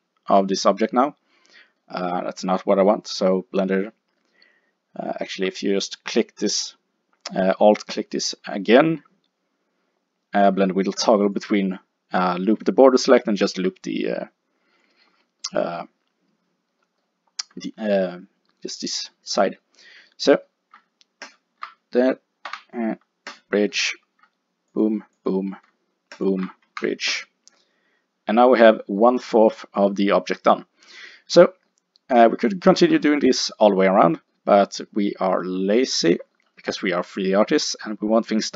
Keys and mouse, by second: 8.0 click, 9.8 middle click, 11.0-15.2 drag, 15.2-21.3 middle drag, 21.3 click, 22.5 w, 26.7 w, 27.6 click, 33.5 middle click.